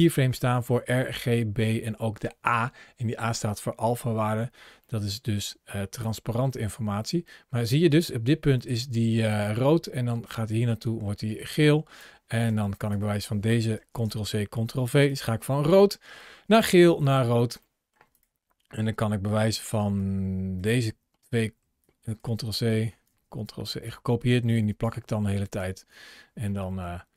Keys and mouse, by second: 4.6 middle click, 5.9-11.9 drag, 12.3 click, 12.6 drag, 13.6 ctrl+c, 13.9 ctrl+v, 14.9-16.8 drag, 17.5 middle click, 18.8-19.1 drag, 19.6 click, 19.8-20.5 drag, 21.1 ctrl+c, 21.6-22.0 drag, 22.5-22.9 drag, 22.9 ctrl+v, 23.3-23.7 drag, 24.3-24.6 drag, 26.5 middle click.